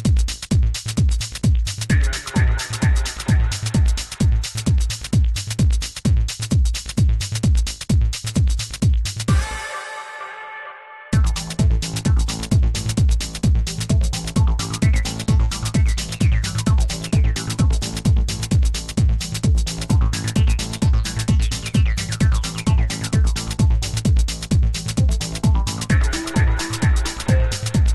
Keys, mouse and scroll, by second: 1.6 r, 7.4 r, 12.2 Tab, 13.9-15.8 right drag, 15.8 shift+d, 17.9-19.7 right drag, 19.7 ctrl+l, 21.0 x, 23.8-25.5 right drag, 25.5-27.2 drag, 27.8 e.